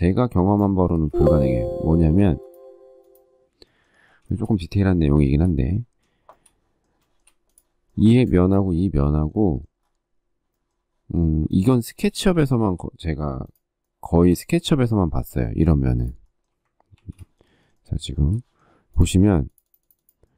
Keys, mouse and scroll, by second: 0.7 space, 4.0 shift+middle click, 5.0 shift+middle click, 6.1 shift+middle click, 6.9 shift+middle click, 12.3 shift+middle click, 12.4 shift+scroll, 12.4 shift+middle click, 14.8 shift+middle click, 16.2 shift+middle click, 16.3 shift+double middle click, 16.7 ctrl+shift+g, 17.8 ctrl+shift+g, 18.0 shift+middle click.